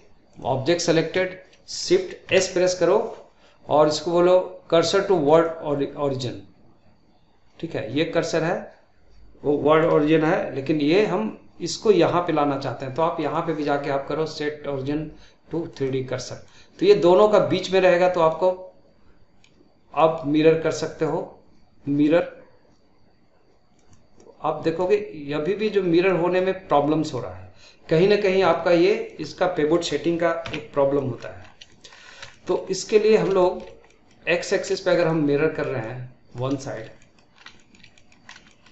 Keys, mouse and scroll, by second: 0.2-2.1 drag, 2.1 shift+s, 13.0-16.1 drag, 16.3-20.7 middle drag, 20.7-23.8 drag, 24.6-30.3 middle drag, 30.3 ctrl+z, 30.8 middle click, 31.3 scroll up 2, 31.6-31.9 shift+middle drag, 31.9-32.2 scroll down 2, 32.2-33.0 shift+middle drag, 33.0 scroll up 2, 33.3-34.3 shift+middle drag, 34.3 scroll down 1, 34.6-37.2 shift+middle drag, 37.2 scroll up 2, 37.4 shift+middle click, 38.1 scroll up 2, 38.3-38.7 shift+middle drag.